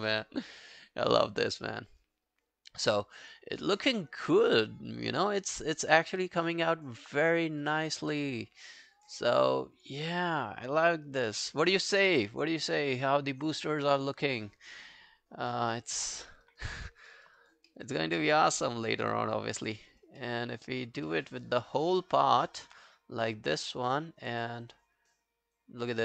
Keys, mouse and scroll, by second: 15.9 double click, 16.2 alt+middle click, 16.5 alt+right click, 16.9 alt+middle click, 17.2 alt+right click, 17.4 alt+click, 17.7 alt+middle click, 18.0 alt+scroll down 1, 18.2 alt+click, 18.8 alt+right click, 19.1 alt+middle click, 19.3 alt+right click, 19.6 alt+click, 19.9 alt+right click, 20.2 alt+middle click, 20.5 alt+click, 21.1 alt+middle click, 21.4 alt+right click, 21.6 alt+click, 22.0 alt+middle click, 22.2 alt+right click, 22.5 alt+middle click.